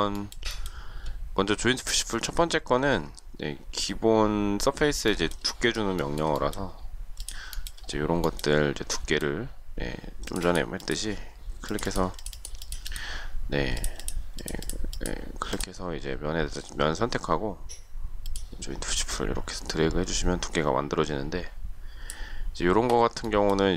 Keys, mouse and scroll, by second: 0.1 shift+middle click, 5.1 shift+middle click, 6.0 shift+middle click, 7.5 shift+middle click, 7.6 shift+double middle click.